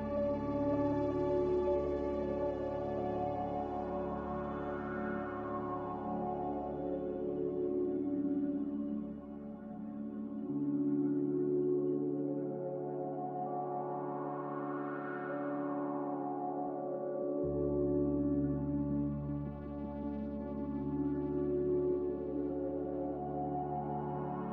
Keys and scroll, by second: 13.2-14.1 typing, 17.4-18.1 typing.